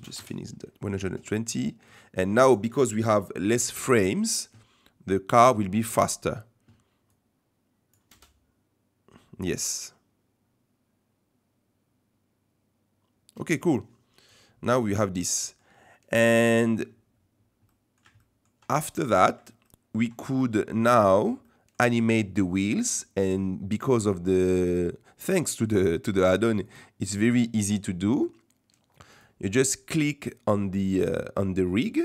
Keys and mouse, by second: 7.2 click, 8.1 space, 13.4 space, 15.2-15.6 middle drag, 16.5-16.8 shift+middle drag, 17.7-18.0 middle drag, 18.2 shift+middle drag, 18.8 middle click, 19.6 shift+middle drag, 21.4 click, 21.5 middle click, 26.6 click.